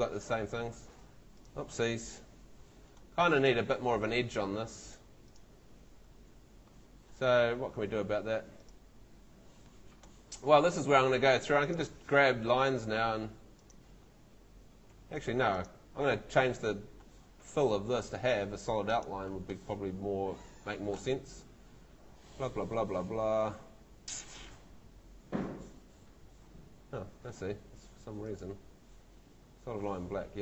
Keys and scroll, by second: 4.5 Home, 7.3 Escape, 12.2 Escape, 14.9 Escape.